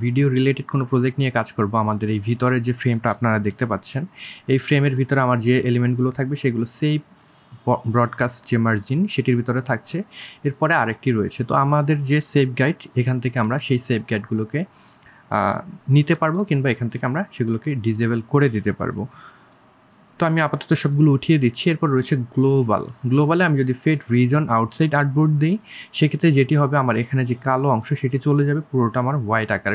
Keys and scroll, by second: 0.8 1, 10.7 1, 16.4 3.